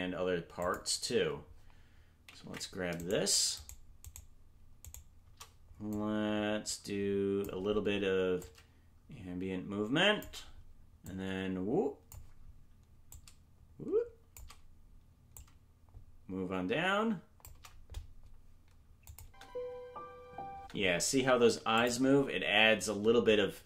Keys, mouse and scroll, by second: 0.5 click, 2.4 ctrl+Tab, 3.0 right click, 3.6-5.6 shift+right drag, 5.9-7.4 drag, 8.3-10.2 drag, 11.0-12.1 drag, 13.0-14.3 drag, 15.3-17.4 drag, 19.0 click, 19.2 space, 21.7 click, 21.7 space.